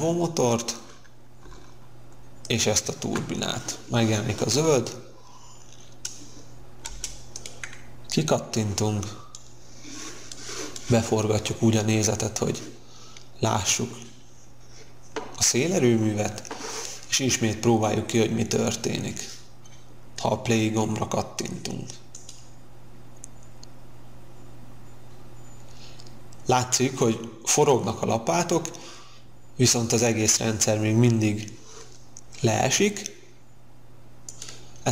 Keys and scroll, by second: 6.8 space.